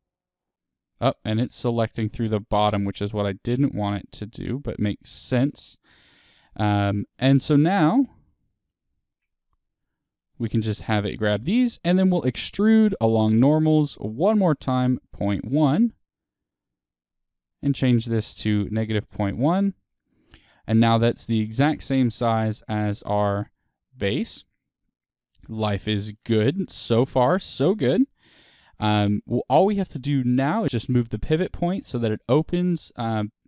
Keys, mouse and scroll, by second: 0.3 ctrl+click, 0.4-1.5 middle drag, 1.5 shift+click, 5.6-6.7 middle drag, 6.7 shift+click, 7.3-9.0 middle drag, 9.0 ctrl+click, 9.4 middle click, 10.3 shift+click, 10.7-14.7 middle drag, 14.7-20.4 drag, 20.4-20.8 scroll down 2, 20.8 scroll, 20.8 middle click, 21.4 Tab, 22.9 click, 23.4 middle click, 25.0-31.7 middle drag, 25.5-25.8 scroll up 2, 31.9 middle click, 33.1 middle click.